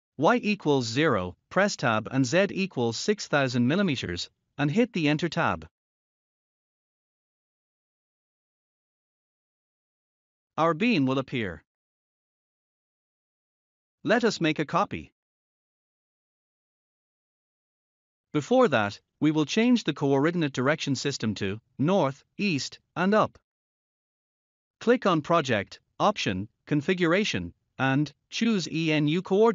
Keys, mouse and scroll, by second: 1.4 0, 3.2 Tab, 5.8-8.1 typing, 10.4 Return, 12.3 scroll up 1, 15.0 scroll up 1, 24.0 click, 26.4 click, 27.9 click.